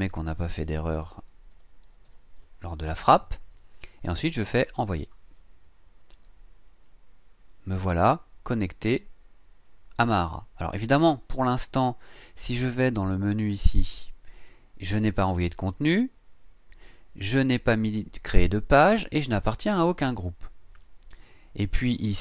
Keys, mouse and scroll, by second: 0.1-2.0 typing, 4.7 click, 13.4 click, 21.1 click, 21.9 click.